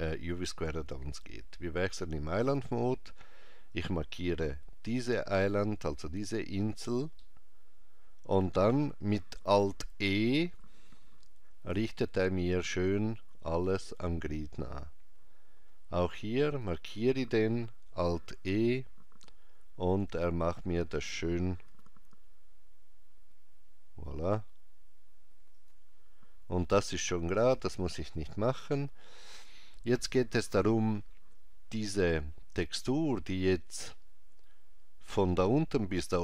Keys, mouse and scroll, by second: 2.1 click, 3.7 click, 6.2 scroll down 1, 7.2 middle click, 10.4 alt+e, 16.5 click, 18.3 alt+e, 21.7 g.